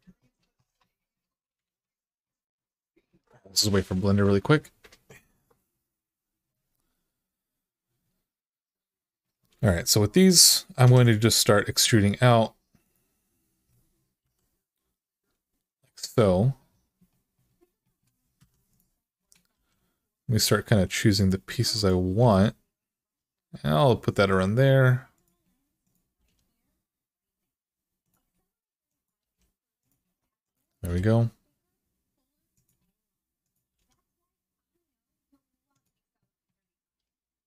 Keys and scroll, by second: 1.4 alt+z, 10.6 2, 14.0 e, 18.1 1, 19.3 g, 22.0 g, 26.0 g, 29.0 g, 30.6 g, 33.5 g, 36.7-37.3 typing.